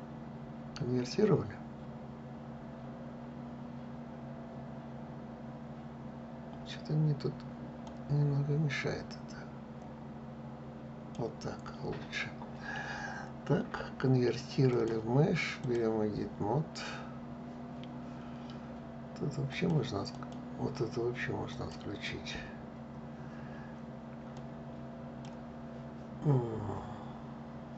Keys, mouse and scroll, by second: 7.5-10.5 drag, 14.4-17.4 drag, 19.2 click, 19.8 click, 21.2 click, 24.0-27.0 drag.